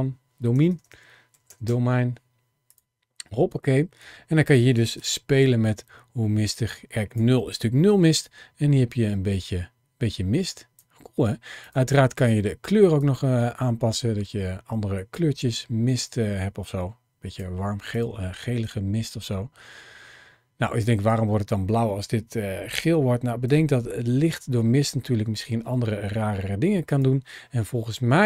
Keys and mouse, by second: 0.5 BackSpace, 0.6 BackSpace, 4.9-7.0 shift+drag, 8.1-10.6 shift+drag, 11.5 click, 17.7 click, 18.6-20.9 shift+drag, 23.4-26.9 shift+drag.